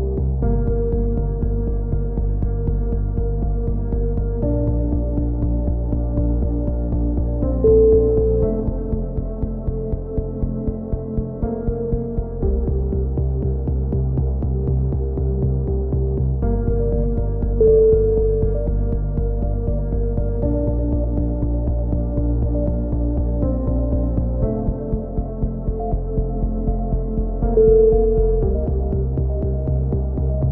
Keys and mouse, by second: 0.0 click, 2.8 ctrl+z, 4.1-5.4 drag, 5.4 a, 5.7 click, 7.1 c, 10.7 click, 11.5 click, 12.8 middle click, 13.6 click, 17.7 a, 17.9 middle click, 18.4 z, 18.8 click, 20.8-23.4 drag, 21.5 right click, 23.1 shift+q, 23.4 a, 23.6-24.6 drag, 28.9 KP_3, 29.1 z, 30.0 click, 30.3 middle click.